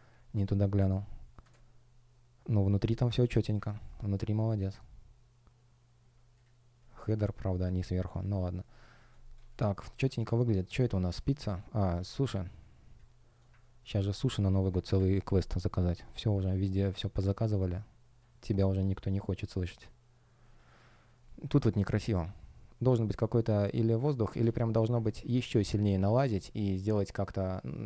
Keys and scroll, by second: 9.0 shift+o, 9.2 space, 10.6 space, 16.6 space, 22.5 shift+p.